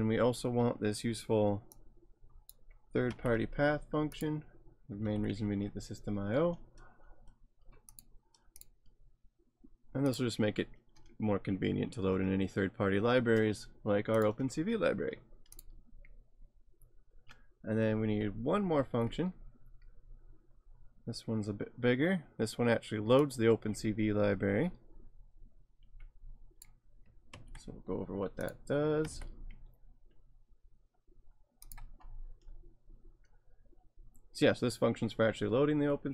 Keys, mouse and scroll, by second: 1.8 click, 3.1 ctrl+c, 4.2 click, 5.0 ctrl+v, 7.9 click, 10.1 click, 14.2 click, 18.8 alt+Tab, 19.7-21.1 scroll down 3, 23.3 click, 27.3 ctrl+c, 28.4 click, 29.0 ctrl+v, 30.6-31.7 scroll up 2, 31.7 click, 32.0-33.3 scroll up 2.